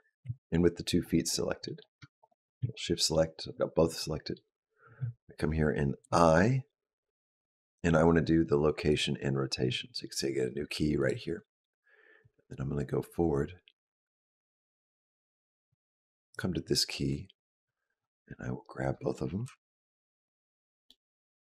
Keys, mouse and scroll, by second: 0.0 KP_Decimal, 0.9-1.5 scroll down 4, 1.5 middle click, 2.0 shift+click, 2.6 middle click, 3.8 middle click, 5.8 i, 10.8 click, 12.1 click, 19.3 KP_Decimal, 20.1-21.0 scroll down 4, 20.7 middle click.